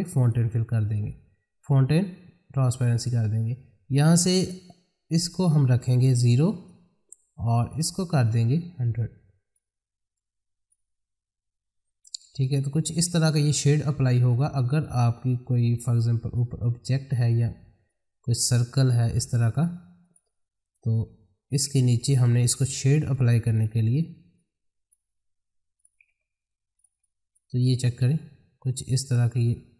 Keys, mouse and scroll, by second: 0.1 click, 4.3-17.2 drag, 17.9 ctrl+click, 20.6 right click, 21.6 click, 22.1 space, 22.5 shift+click, 22.7 c, 23.1 click, 24.0-24.3 scroll up 1, 24.3-25.8 drag, 26.1 c, 26.4-26.7 scroll down 1, 26.7-29.7 drag.